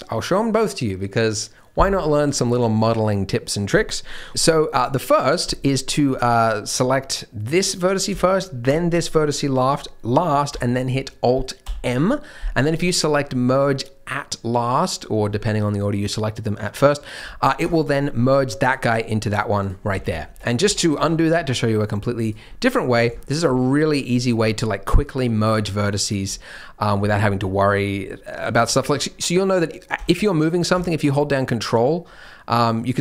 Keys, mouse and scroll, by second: 6.1 click, 7.4 click, 8.6 shift+click, 11.6 alt+m, 18.6 click, 19.2 click, 19.6 click, 20.0 ctrl+z, 20.2 ctrl+z, 20.6 ctrl+z, 20.9 ctrl+z, 22.2 click, 22.4-22.9 scroll up 2, 22.9 scroll down 3, 23.1 shift+middle click, 23.7 scroll down 1, 26.7-27.3 scroll up 2, 27.3 scroll down 1, 27.4-27.9 scroll down 5, 27.9-28.4 scroll up 2, 28.2 middle click, 28.4 scroll down 2, 28.7 middle click, 29.0 scroll down 1, 29.3 middle click, 29.9 g.